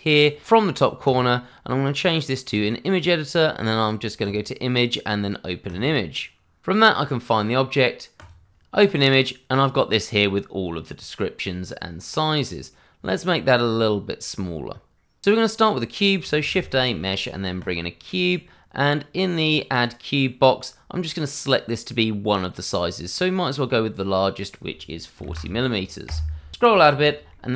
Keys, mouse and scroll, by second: 1.0 click, 6.9 click, 12.5 click, 14.0-14.7 scroll down 1, 14.7-15.2 scroll up 1, 16.3 shift+a, 17.6 click, 24.3 click, 25.1 4, 26.0 Return, 26.6 scroll down 1, 27.5 shift+middle click.